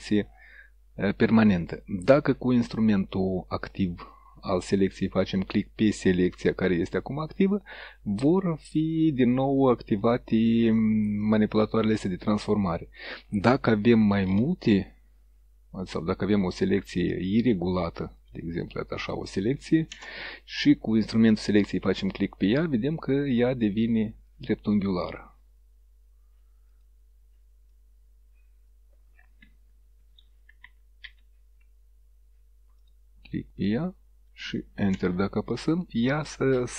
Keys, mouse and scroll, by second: 6.2 click, 10.1 click, 11.3-12.7 drag, 14.2-16.4 shift+drag, 17.2-18.4 shift+drag, 19.9 Return, 21.9 click, 24.3-25.3 drag, 26.8 click, 27.8-28.9 drag, 30.3 ctrl+z, 32.8 click, 35.0 Return.